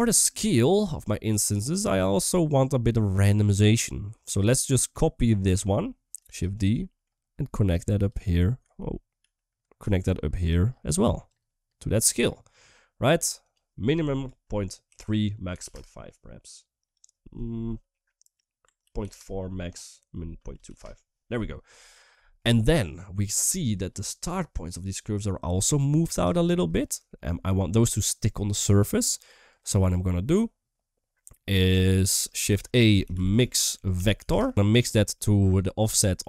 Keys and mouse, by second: 0.6 shift+middle click, 1.1 shift+middle click, 1.6 shift+middle click, 2.4 click, 2.6 click, 3.2 typing, 3.6 middle click, 4.5 middle click, 5.1 click, 5.7 middle click, 6.2 shift+d, 6.6 middle click, 7.1 g, 8.9 ctrl+z, 9.1 ctrl+z, 9.6 g, 11.1-11.9 drag, 13.3-15.6 drag, 16.8-18.9 drag, 19.6-20.6 drag, 23.0 shift+middle click, 24.1 shift+middle drag, 26.1 shift+middle click, 26.9 shift+middle click, 29.2-30.1 drag, 31.7 shift+middle click, 32.0-32.3 typing, 35.0 middle click, 35.6 middle click.